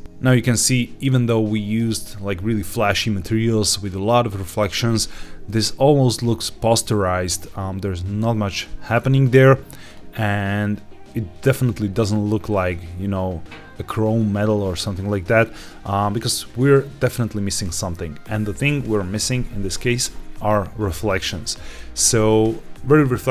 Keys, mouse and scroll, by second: 0.0 scroll down 1, 0.2-2.0 scroll up 1, 5.4 click, 9.8 click, 11.8-12.8 scroll down 3, 16.4-19.7 scroll up 3.